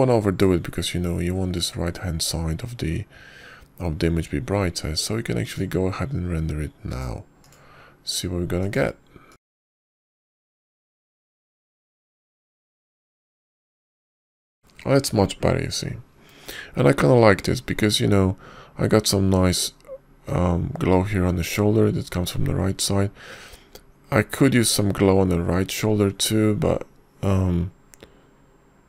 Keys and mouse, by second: 7.3 click, 8.8 click, 9.3 click, 11.2-11.7 drag.